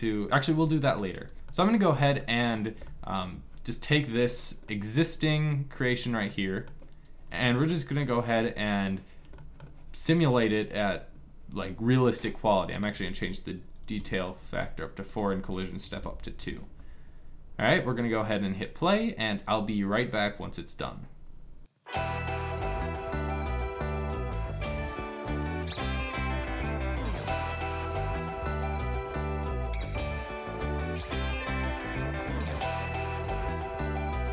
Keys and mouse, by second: 1.1-11.6 middle drag, 12.4-14.7 drag, 23.0 middle click.